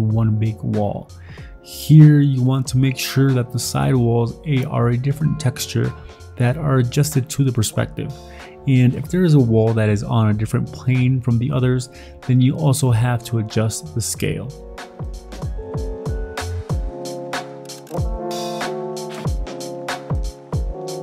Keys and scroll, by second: 0.8-6.6 typing, 7.0 ctrl+t, 7.1 Escape, 7.4 ctrl+t, 7.8 ctrl+d, 7.9-9.3 typing, 10.3 ctrl+t, 10.8 ctrl+j, 11.0 ctrl+t, 11.5 w, 12.3 v, 12.9 ctrl+t, 13.3 ctrl+d, 13.6 w, 13.8 v, 17.7-19.5 typing, 19.6 ctrl+d, 19.7 ctrl+d, 20.6-21.0 typing.